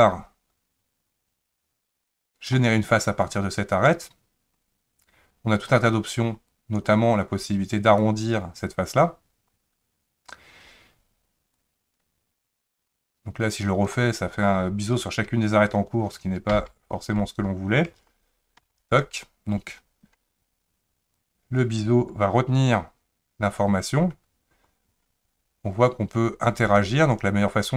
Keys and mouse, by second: 6.6-8.0 drag, 11.6-13.9 drag, 16.5 ctrl+z, 18.6 ctrl+z, 21.2-27.7 drag.